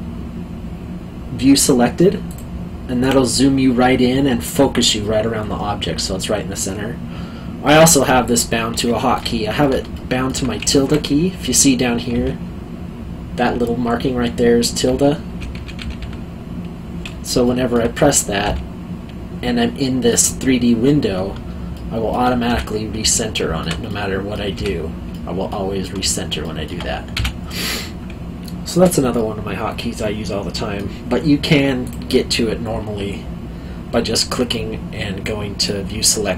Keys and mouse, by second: 2.2 click, 5.0 middle click, 9.9 alt+middle click, 17.4 alt+middle click, 21.7 alt+middle click, 23.1 alt+middle click, 25.1 middle click, 29.1 middle click, 31.8 click.